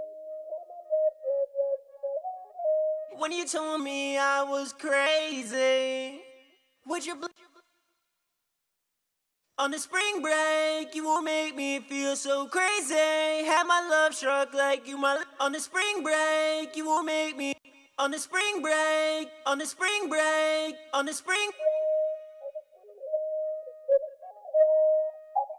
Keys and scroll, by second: 3.1 super+`, 4.0 ctrl+super+w, 8.4 ctrl+Page_Up, 8.6 ctrl+Page_Up, 12.6 F1, 12.7 F2, 17.6 super+`.